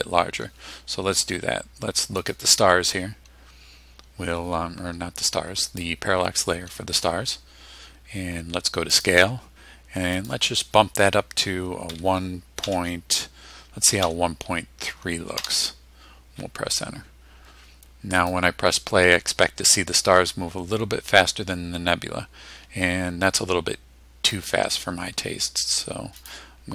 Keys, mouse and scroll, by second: 2.2 click, 5.6 click, 8.9 click, 10.1 click, 11.9 1, 12.6 ., 14.0 3, 15.3 Return, 18.2 click, 24.3 click, 26.2 click.